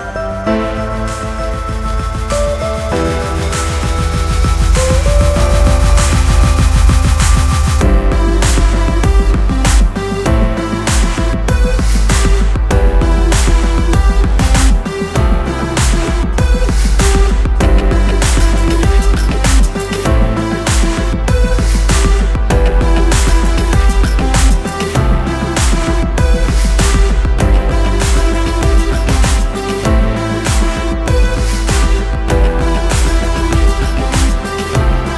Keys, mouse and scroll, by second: 0.3 scroll up 1, 0.6 ctrl+click, 1.0 click, 2.0 alt+click, 2.8 click, 3.8 ctrl+click, 4.6 click, 4.8 double click, 5.9-6.3 scroll up 1, 6.7 F4, 8.1 F9, 9.5 click, 9.9 scroll down 1, 10.1 scroll up 1, 11.4 click, 12.0 click, 12.6 Page_Down, 13.4 click, 14.3 click, 14.9 click, 15.8 F4, 16.9 F9, 17.6 Page_Down, 20.6 ctrl+l, 21.2 click, 22.3 ctrl+o, 22.4 scroll down 1, 23.5 click, 26.3 F4, 26.8 click, 27.5 ctrl+o, 28.5 click, 28.7 double click, 29.9 F9, 30.9 click, 31.6 ctrl+o, 32.9-33.6 scroll up 1, 34.4 click.